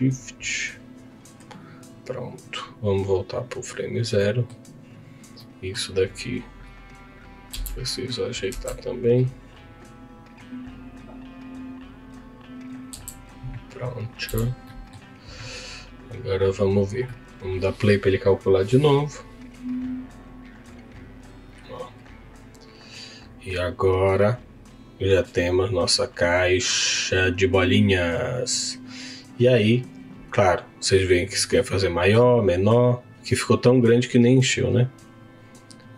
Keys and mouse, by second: 4.1 middle click, 5.4 middle click, 7.4 z, 8.5 Tab, 9.6 click, 12.9 Tab, 13.7 click, 14.2 z, 14.6 middle click, 16.2 click, 17.2 click, 34.9 click.